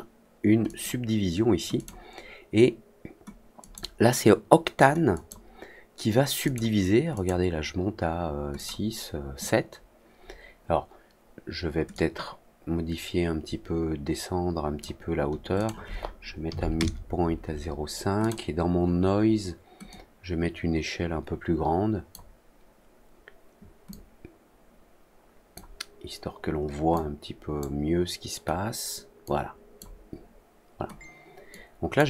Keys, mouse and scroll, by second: 0.6 click, 1.7 click, 3.5 click, 5.1 click, 6.4 click, 7.1 click, 8.5 click, 11.8-14.7 drag, 15.5 click, 18.1 click, 19.8-22.0 drag, 23.8-25.5 drag, 26.9 click, 29.2 click, 31.4 click.